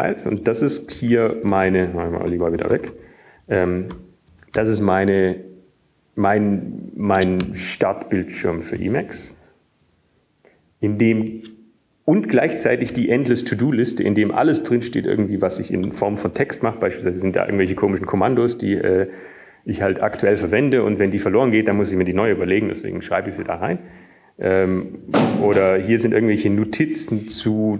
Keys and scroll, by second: 0.7 typing, 2.1-4.7 typing, 6.2 ctrl+k, 6.7 ctrl+k, 6.8 ctrl+k, 8.3 ctrl+k, 10.8 typing, 17.1 typing, 19.2-19.7 typing, 20.1 Up, 22.8 Up, 27.4 Down, 27.5 Down.